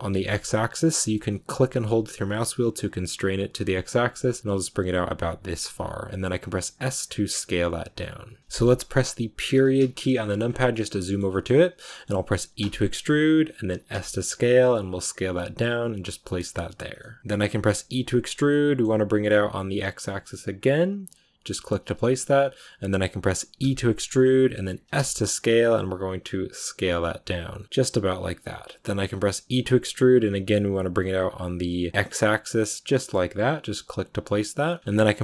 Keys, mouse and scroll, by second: 8.4-9.4 shift+middle drag, 9.4 KP_Decimal, 10.4 scroll down 2, 10.6-12.5 middle drag, 12.5 e, 34.8-35.2 scroll up 2.